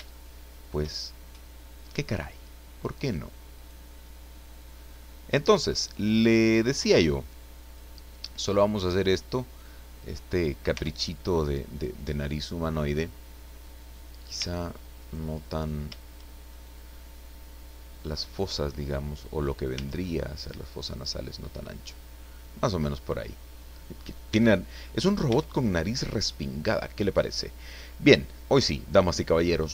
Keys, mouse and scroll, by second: 1.1 shift+scroll up 1, 3.6 right click, 4.6-7.9 drag, 8.6-10.2 drag, 10.7 Tab, 11.1 click, 11.3-13.8 middle drag, 13.9 scroll up 1, 14.4 Tab, 14.9 right click, 16.7-19.7 drag, 19.7 Tab, 20.2 scroll down 2, 20.6-24.1 middle drag, 24.2 Tab, 24.9 scroll down 1, 25.2 Tab, 25.7-26.0 scroll down 1, 26.2 middle click, 27.0-27.6 scroll down 2, 27.7 middle click, 29.0-29.4 scroll up 1, 29.4-29.7 scroll down 1.